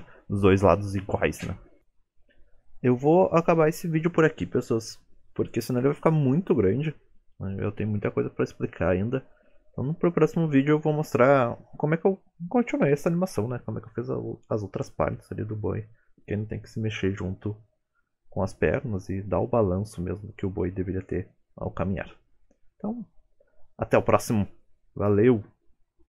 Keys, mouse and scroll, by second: 0.1 click, 3.4 shift+middle click, 3.7-4.4 scroll up 3, 4.0 middle click, 4.4-4.8 scroll down 4, 5.6 click, 6.2 middle click, 9.9-10.3 scroll up 3, 10.3 middle click, 10.9 click, 11.9 click, 12.7 click, 13.4 click, 13.9 click, 14.9 click, 16.5 click, 19.2 click, 20.7 click, 21.4-23.0 scroll down 3, 21.7 middle click, 23.2 shift+middle click, 23.6 middle click, 25.6 r.